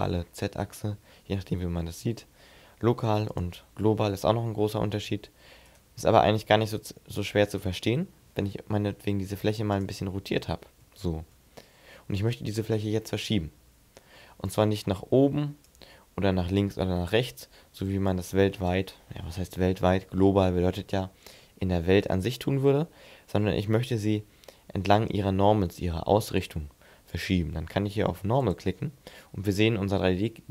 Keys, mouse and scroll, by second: 3.2 click, 4.8 scroll down 2, 5.5 right click, 5.9 middle click, 7.1 right click, 8.0 r, 9.6 click, 9.9 middle click, 10.7 shift+middle click, 11.2-11.6 scroll up 2, 14.2 click, 16.4 click, 17.9 click, 19.3 ctrl+z, 26.9 click, 30.3 middle click.